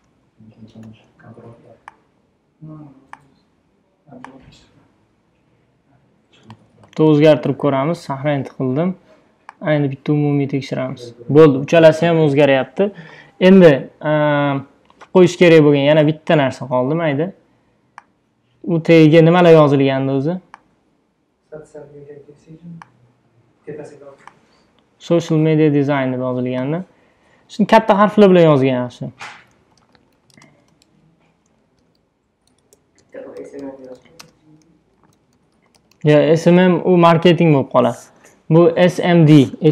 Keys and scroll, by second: 0.8 super+t, 6.7 Return, 8.0 super+s, 28.6-36.6 typing.